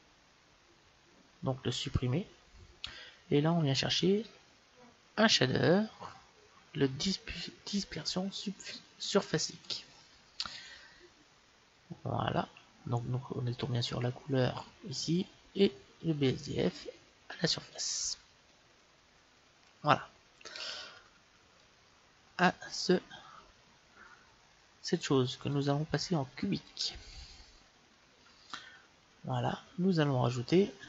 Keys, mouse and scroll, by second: 1.1 x, 3.8 shift+a, 13.5-15.3 drag, 15.8-17.8 drag, 21.4-23.3 drag, 25.4-27.3 drag.